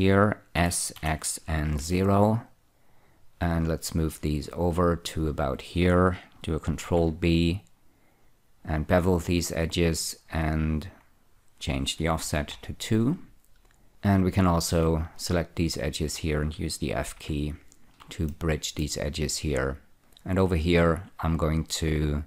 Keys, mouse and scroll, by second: 0.0 scroll up 1, 0.9-2.1 typing, 2.8 click, 4.1 click, 7.1 ctrl+b, 10.0 click, 11.2 click, 12.5 2, 12.9 Return, 13.9-14.8 scroll up 1, 14.8 click, 16.5 shift+click, 17.5 f, 18.6 shift+middle click, 20.4 click.